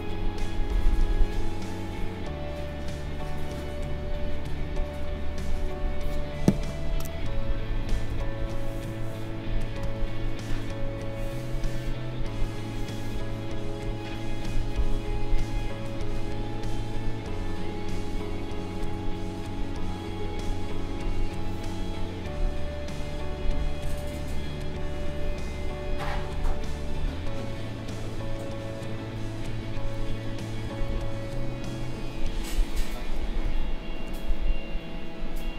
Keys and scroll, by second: 8.1 n, 30.9 ctrl+a, 33.4 ctrl+z.